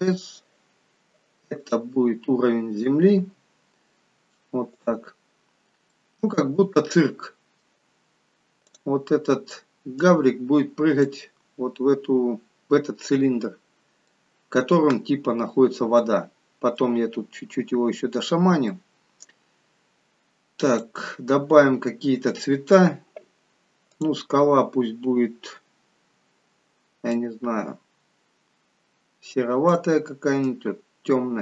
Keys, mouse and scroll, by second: 3.5 s, 5.4-6.2 scroll up 3, 5.9 middle click, 8.5 click, 11.7-12.5 scroll up 5, 12.6 middle click, 15.4-16.2 scroll down 3, 16.2 middle click, 17.9-18.5 scroll down 1, 18.8 middle click, 20.6 click.